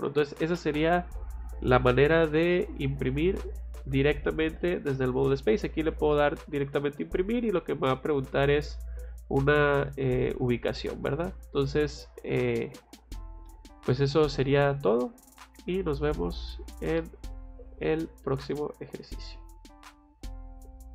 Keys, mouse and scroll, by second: 5.9 click, 8.2 click, 13.4 middle click.